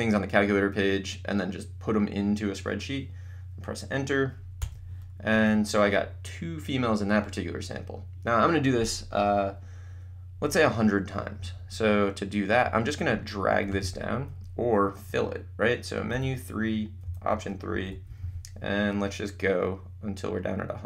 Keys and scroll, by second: 4.6 Return, 5.3 Up, 13.9 Menu, 16.3 3, 17.7 Down.